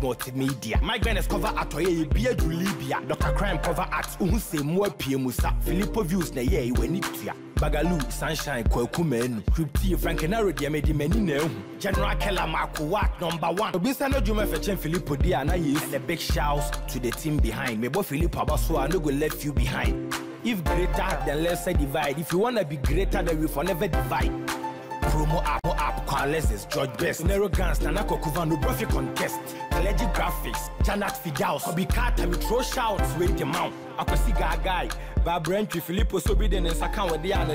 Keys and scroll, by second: 13.5 ctrl+a.